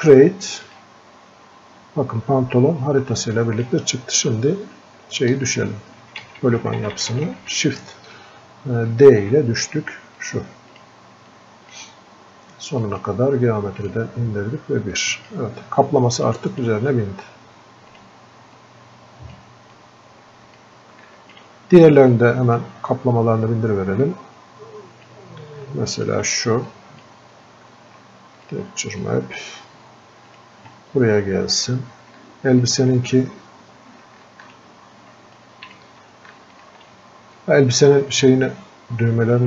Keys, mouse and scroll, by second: 35.7-38.9 shift+drag.